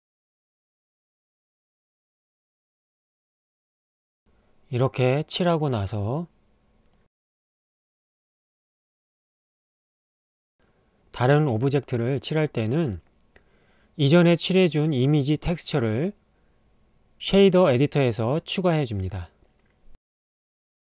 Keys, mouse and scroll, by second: 0.7 click, 0.9 shift+middle click, 4.3 ctrl+Tab, 10.7 click, 10.8 ctrl+Tab, 10.8 click, 12.7 ctrl+Tab, 18.4 shift+a.